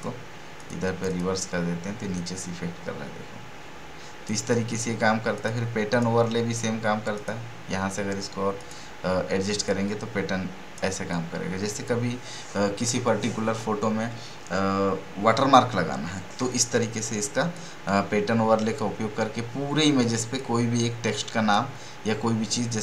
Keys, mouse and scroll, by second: 17.5-22.8 drag.